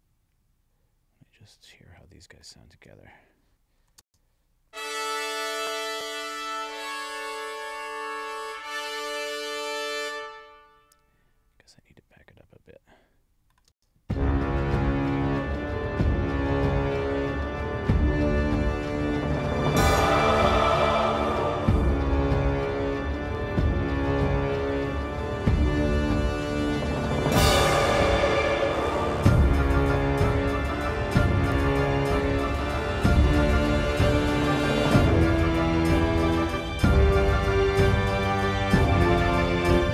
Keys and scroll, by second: 4.0 space, 9.5 space, 13.7 space.